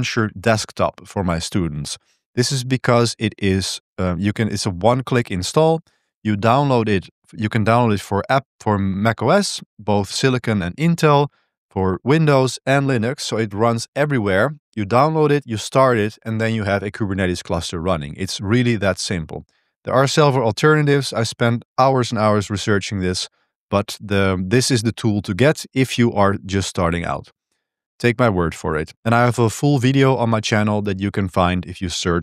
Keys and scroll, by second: 0.1 super+1.